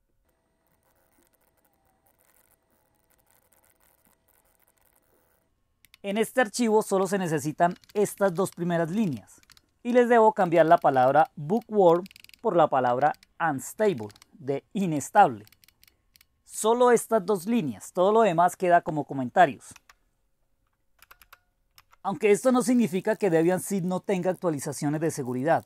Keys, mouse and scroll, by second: 0.0-5.7 typing, 0.8 Left, 0.9 Left, 0.9 Delete, 1.1 Right, 5.9 Delete, 5.9 Right, 6.1 Right, 6.3 Right, 6.5 Right, 7.4-15.5 typing, 11.9 Down, 12.0 Left, 12.1 Left, 12.2 Left, 12.3 Left, 15.8-16.1 Delete, 16.5 Delete, 19.8 Down, 21.0 Return, 21.3 Return, 21.8 Up, 22.4-25.6 typing.